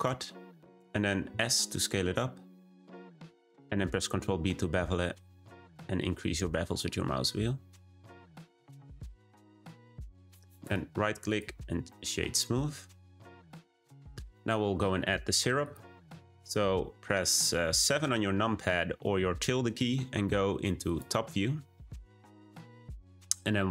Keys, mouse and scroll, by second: 1.2 s, 4.1 b, 8.9 Tab, 9.5-10.6 middle drag, 10.6-11.9 right drag, 11.9-14.9 middle drag, 15.5 click, 19.4 `.